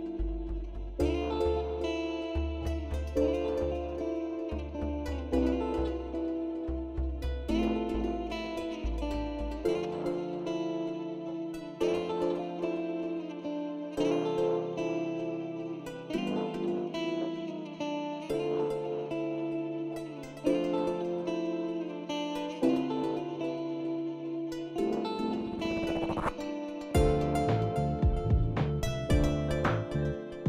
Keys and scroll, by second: 0.8 ctrl+v, 1.5 ctrl+a, 14.8 ctrl+c, 20.6 ctrl+v, 21.2 ctrl+a.